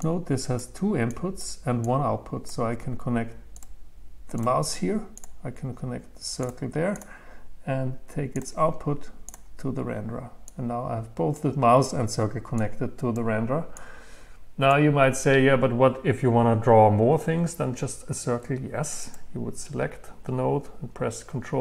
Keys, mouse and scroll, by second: 0.0 click, 1.1-2.2 drag, 3.6-10.6 drag, 11.3-12.7 drag, 19.1-21.2 drag.